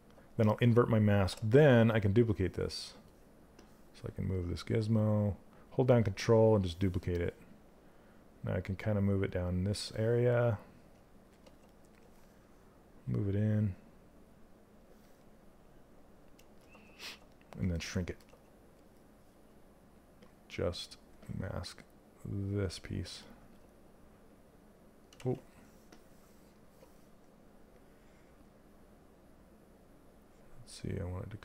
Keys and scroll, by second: 24.7 ctrl+z.